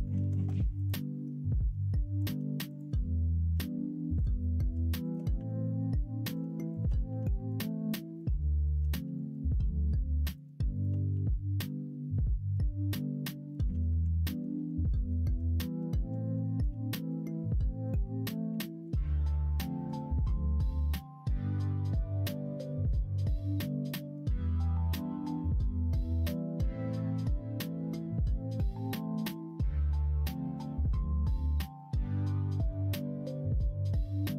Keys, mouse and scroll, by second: 0.1 ctrl+z, 0.7 alt+click, 2.6 click, 3.5 f, 4.1 click, 4.3 middle click, 5.3 f, 5.7 middle click, 6.7 shift+click, 7.2 middle click, 9.3 middle click, 9.3 f, 10.7 click, 12.1 middle click, 12.9 middle click, 13.6 ctrl+z, 13.8 ctrl+z, 13.9 ctrl+z, 14.0 middle click, 14.5 ctrl+z, 14.8 ctrl+z, 14.9 ctrl+z, 15.2 ctrl+z, 15.4 ctrl+z, 15.6 ctrl+z, 15.8 ctrl+z, 15.9 ctrl+z, 16.2 ctrl+z, 16.5 ctrl+z, 17.5 middle click, 18.4 1, 19.0 alt+z, 19.2 middle click, 20.0 click, 22.2 shift+d, 23.9 middle click, 25.2 k, 26.3-28.9 typing, 29.1 middle click, 30.5 x, 31.7 middle click, 32.4 middle click, 33.1 2, 33.4 middle click.